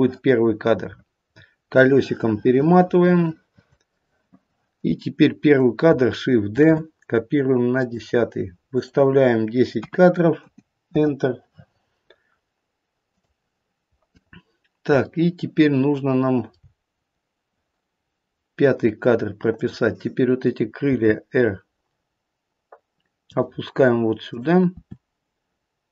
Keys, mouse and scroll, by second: 0.4-1.9 scroll up 19, 1.9 middle click, 6.5 shift+d, 8.7 click, 13.1 click, 15.1 shift+middle click, 16.6-18.0 scroll down 2, 18.0 scroll down 1, 18.1-18.5 scroll up 1, 19.5 click, 20.9 r, 24.2 click, 24.8 r.